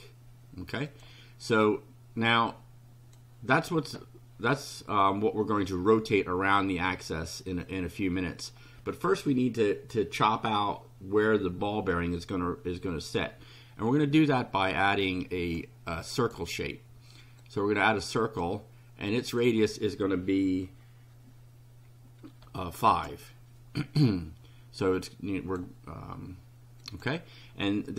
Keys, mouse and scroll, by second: 0.9 click, 2.3-3.3 drag, 15.1 click, 16.2 click, 17.4 click, 19.1 click, 22.4 5, 22.9 Return, 24.8 click, 26.8 click.